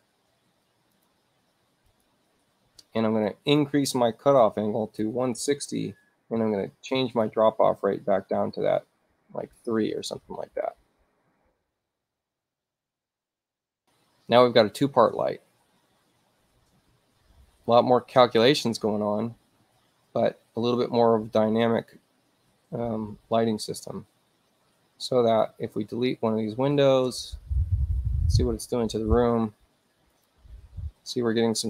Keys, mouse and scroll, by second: 1.0 click, 1.9 click, 3.3 click, 4.9-6.0 typing, 7.0 click, 9.2 3, 10.0 Tab, 11.6 click, 13.4 click, 24.7 space, 25.3 click, 27.5 x, 30.1 click.